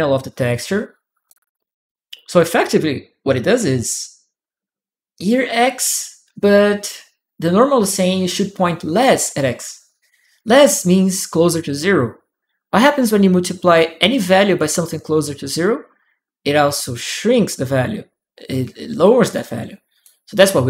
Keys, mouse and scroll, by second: 1.5 click, 4.9 click, 18.8-19.8 drag.